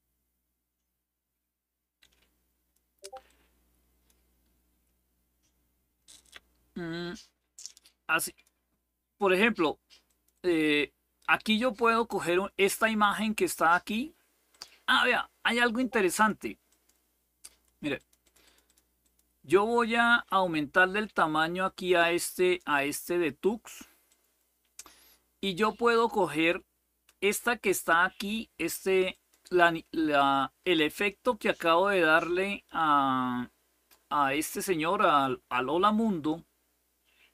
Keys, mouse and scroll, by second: 3.0 click, 7.4 click, 9.8 click, 11.7 click, 14.2 click, 15.8 click, 16.4 click, 17.7 click, 18.0 click, 18.7 click, 20.6-22.5 drag, 23.8-25.7 drag, 28.8 click, 33.6 click, 34.7 click.